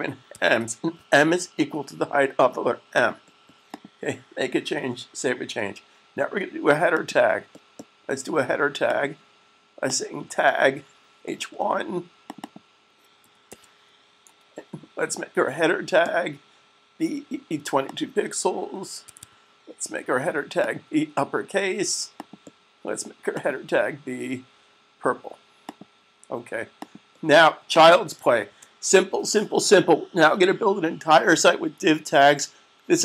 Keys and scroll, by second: 0.0-0.4 typing, 4.5 super+s, 13.0-13.5 typing, 18.7-19.5 typing, 29.2 super+s.